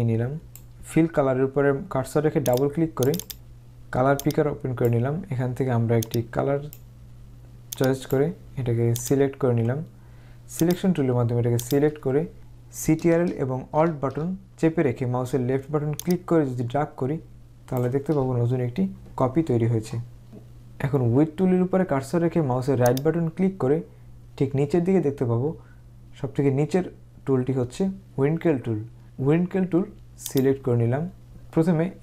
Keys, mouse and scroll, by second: 2.6 click, 4.3 click, 6.1 click, 10.7 click, 22.9 right click, 30.4 click.